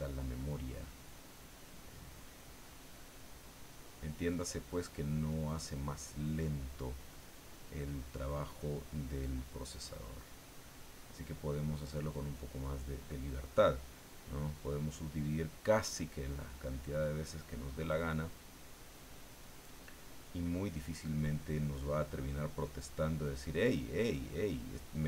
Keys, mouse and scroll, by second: 2.5-4.1 drag, 9.6-12.3 middle drag, 12.9-14.0 middle drag, 14.4-24.6 drag, 24.8-25.0 drag.